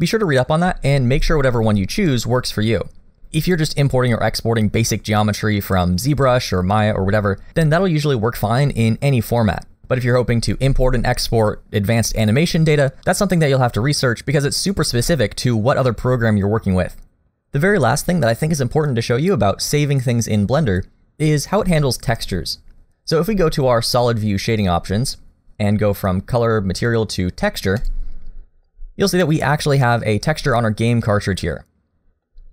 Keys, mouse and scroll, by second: 1.7 middle click, 12.6 middle click, 14.6 middle click, 24.5 click, 30.5 middle click.